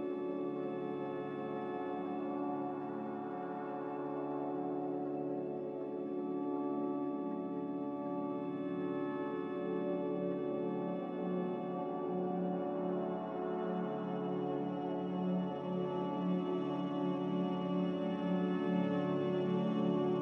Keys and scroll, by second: 2.8 2, 2.8 0, 3.0 Return, 9.4 a, 17.5 b, 19.7 Delete.